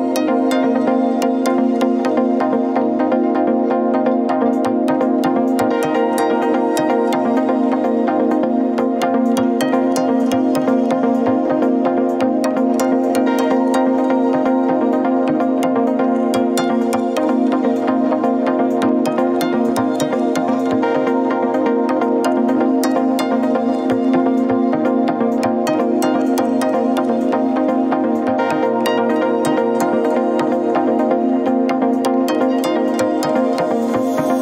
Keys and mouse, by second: 0.0-1.0 middle drag, 1.9-3.1 middle drag, 7.7 click, 8.3 click, 10.4 click, 12.9-16.4 middle drag, 16.7-17.2 middle drag, 17.6 click, 21.1 click, 21.5 click, 22.1 click, 23.0 Tab, 23.7 middle click, 24.2 Tab, 24.9 click, 25.3-25.9 middle drag, 27.4 ctrl+s.